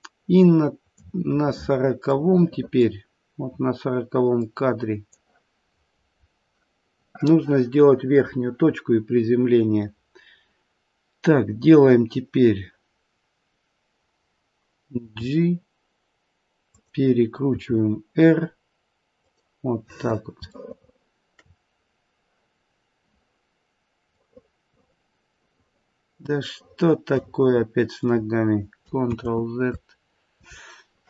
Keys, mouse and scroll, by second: 1.3-2.1 scroll down 2, 2.1 middle click, 5.1 click, 15.0 g, 17.4 r, 19.8-20.6 scroll up 3, 20.6 shift+middle click, 20.6-21.7 scroll up 2, 21.7-22.9 scroll down 1, 22.9-23.5 scroll down 1, 24.1 middle click, 24.3 middle click, 26.7 middle click, 29.2 ctrl+z.